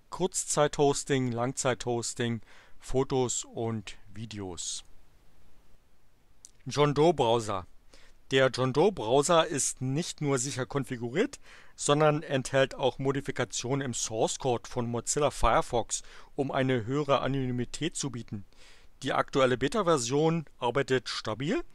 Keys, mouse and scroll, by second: 4.7 click.